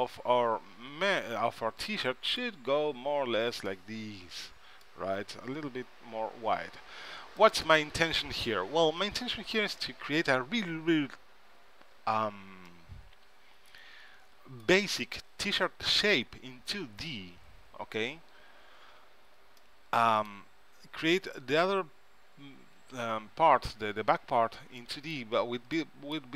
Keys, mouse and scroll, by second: 5.4 s, 10.8-13.9 middle drag, 16.9 middle click, 19.0 KP_3, 19.9-22.1 middle drag, 24.9-26.3 middle drag.